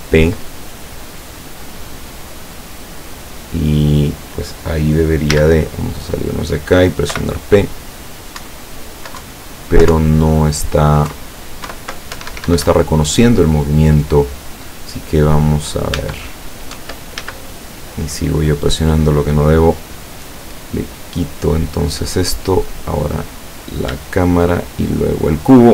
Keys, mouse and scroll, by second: 2.2 click, 5.3 z, 7.2 p, 8.5 Up, 9.3 Down, 10.0 Up, 11.2 Left, 11.8 Right, 12.2 Escape, 16.0 Tab, 16.8 Tab, 17.3 z, 18.0 right click, 18.6 right click, 21.1 click, 22.6 right click, 24.8 shift+right click.